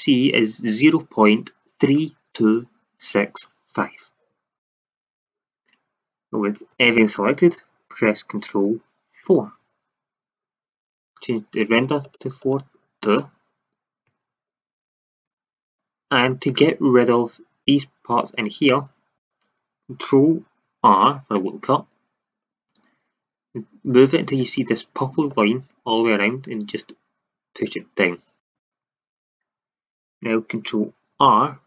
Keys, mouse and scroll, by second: 4.6-6.7 drag, 6.7 a, 6.8 a, 9.2 ctrl+4, 12.0 click, 14.0 a, 15.3 Tab, 18.1 Tab, 20.8 ctrl+r, 28.5-30.5 drag, 31.1 ctrl+r.